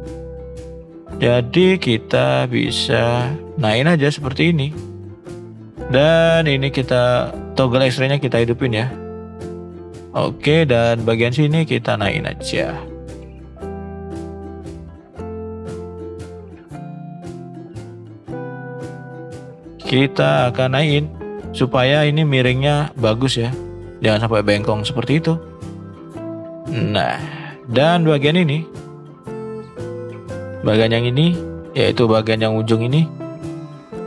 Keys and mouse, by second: 1.6 shift+middle click, 2.1 shift+middle click, 3.2-5.2 drag, 6.7-9.0 drag, 9.0-9.4 middle drag, 9.7 middle click, 11.4 click, 11.8 click, 12.6 drag, 13.1 shift+drag, 13.5 middle drag, 15.1-15.9 shift+drag, 15.9 ctrl+z, 16.7 click, 17.1 middle drag, 18.9 shift+middle click, 19.7-21.6 drag, 22.1 shift+middle click, 24.5-26.6 drag, 27.2 shift+middle click, 28.8 click, 30.3 click, 30.9 click, 31.4 middle click, 32.8 middle click.